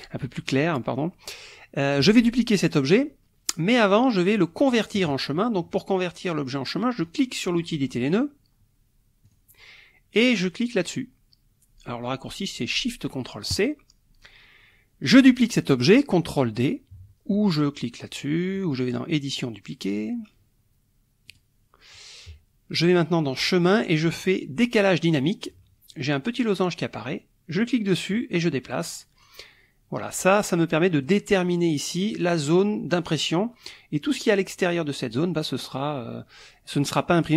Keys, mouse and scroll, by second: 3.8 click, 7.0 click, 9.3 click, 13.5 click, 19.1 click, 21.3 click, 23.3 click, 25.1 click, 27.6-31.2 drag.